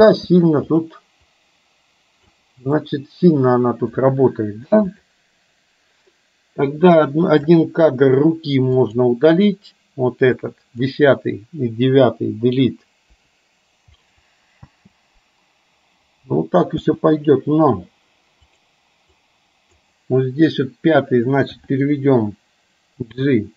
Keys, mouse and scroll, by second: 0.0 space, 0.9 click, 1.4-2.5 drag, 2.9-4.0 middle drag, 5.0 click, 6.7-7.6 drag, 8.7 click, 10.4-10.9 drag, 13.2 Delete, 14.6 space, 16.9 space, 18.6 click, 19.2-19.9 drag, 21.5 g.